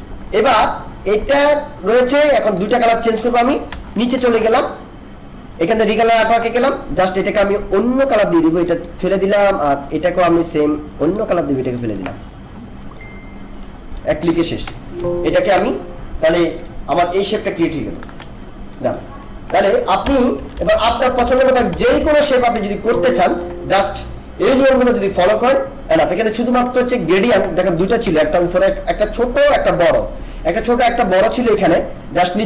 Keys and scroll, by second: 20.0 BackSpace, 20.5 ctrl+-, 21.2 ctrl+BackSpace, 21.4 ctrl+=, 22.6 alt+space, 28.0 ctrl+z.